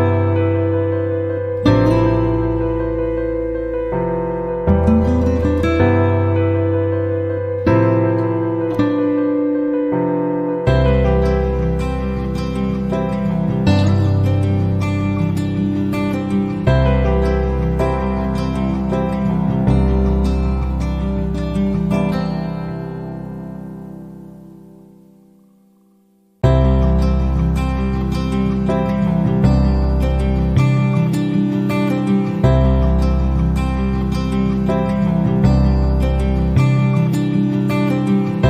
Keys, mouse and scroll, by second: 1.6 click, 3.1 click, 3.9 click, 4.4 click, 4.9 click, 6.6 click, 7.5-9.0 drag, 13.3 click, 14.9 click, 17.5 ctrl+click, 18.8 click, 18.8 right click, 20.8 KP_2, 21.0 KP_5, 21.3 KP_Enter, 24.7-25.7 drag, 26.7 middle click, 27.8-29.3 drag, 30.4 click, 31.8 click, 32.8-35.5 drag, 36.6 click, 38.2 click.